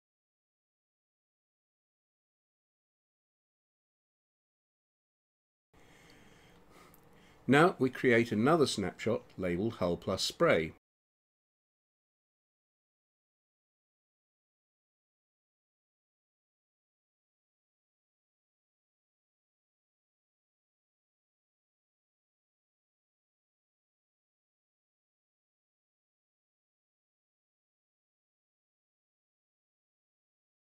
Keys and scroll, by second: 0.0-0.9 typing, 11.1 shift+h, 11.4 u, 12.1 l, 13.5-15.5 typing.